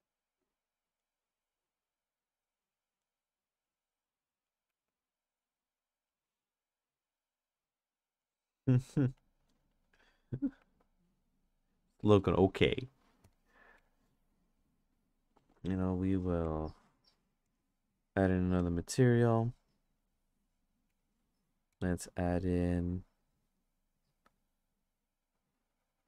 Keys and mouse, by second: 0.1 click, 2.2 click, 3.7 click, 4.7 ctrl+z, 5.1 click, 7.1-8.2 drag, 9.2 click, 10.6 ctrl+z, 13.2 click, 15.7 click, 16.5-17.5 drag, 20.9-26.0 drag.